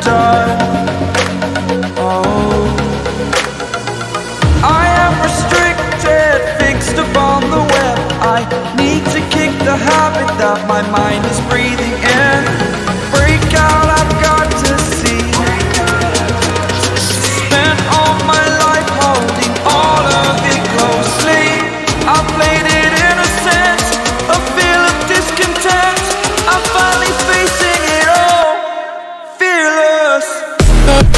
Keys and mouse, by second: 0.8 click, 2.0 right click, 2.6 click, 3.3 click, 4.9 click, 7.5 ctrl+t, 9.1 click, 11.6-12.3 Down, 12.4 Down, 12.6 Down, 12.7 Down, 14.5 click, 16.4 Return, 18.0 right click, 18.7 click, 19.5 click, 20.2 click, 23.2 Up.